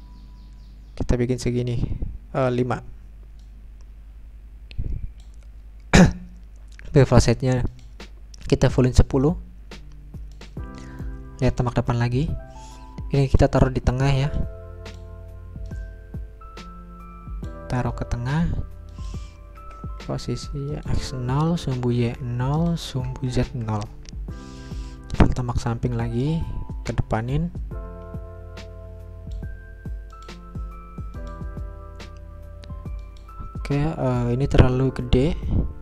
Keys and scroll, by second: 19.6 0, 21.3 Return, 22.0 0, 22.8 Return, 23.3 0, 24.7 Return.